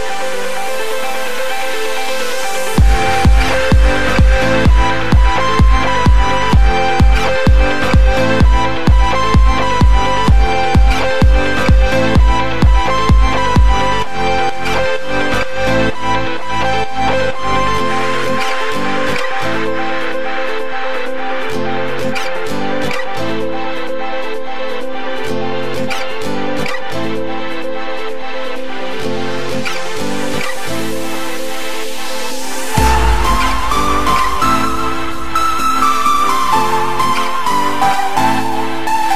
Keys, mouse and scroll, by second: 9.3-11.5 drag, 11.5-11.9 scroll up 1, 11.9-13.1 shift+middle drag, 13.1 click, 15.2 KP_3, 15.9-17.3 scroll up 2, 17.3 s, 20.4 click, 21.6-22.2 scroll up 5, 22.2 shift+middle click, 22.8-23.3 scroll up 5, 23.3 s.